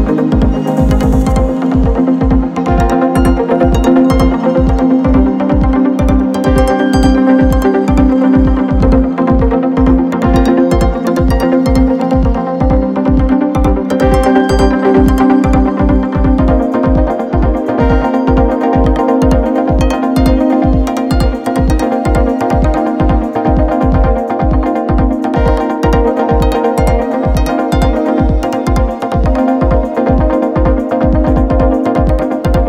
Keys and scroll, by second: 19.6 Right, 21.1 Return.